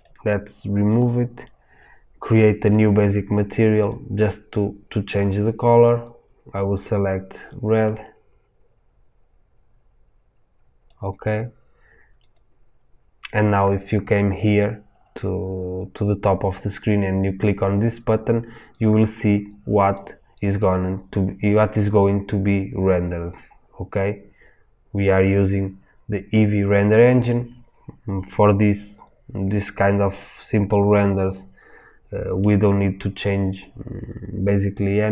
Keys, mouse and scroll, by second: 0.0 click, 1.0-2.9 drag, 12.3 click, 20.0 click, 29.8-35.1 middle drag.